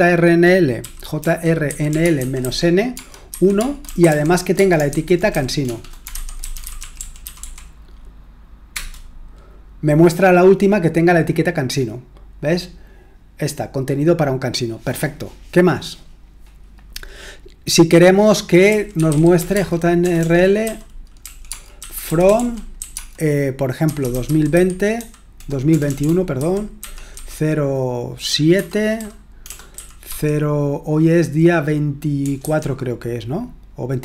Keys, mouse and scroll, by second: 0.5-7.8 typing, 8.7 Return, 18.4-30.0 typing, 32.2 BackSpace, 32.4 BackSpace.